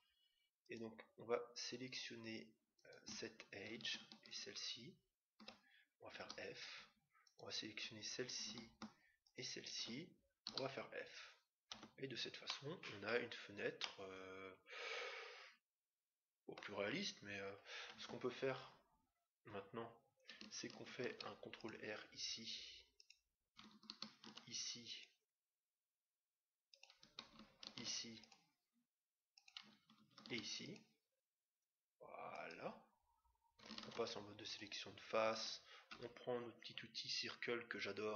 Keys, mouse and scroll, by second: 0.6-2.4 right drag, 2.7-6.1 right drag, 6.1 f, 7.2-8.8 right drag, 9.2-10.8 right drag, 10.4 f, 11.7 Tab, 12.4-15.6 middle drag, 16.9-18.8 middle drag, 17.9 Tab, 20.8 ctrl+r, 24.0 ctrl+r, 27.7 ctrl+r, 30.1 ctrl+r, 33.8 ctrl+Tab, 35.9 c.